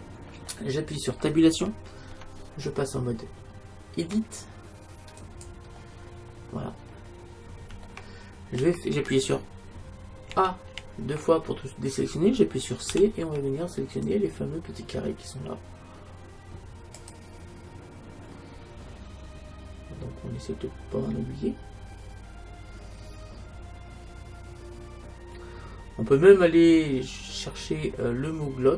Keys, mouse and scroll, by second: 2.1 Tab, 6.1 middle click, 6.9-7.9 scroll up 1, 7.9 middle click, 10.3 a, 10.8 a, 13.0 c.